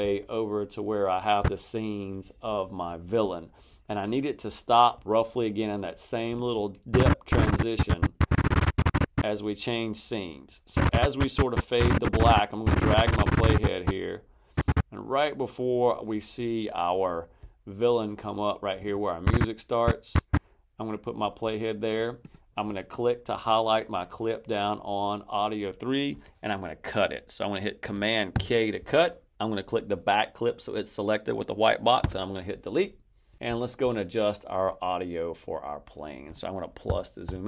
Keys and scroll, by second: 28.2 super+k, 31.9 BackSpace, 36.8 =.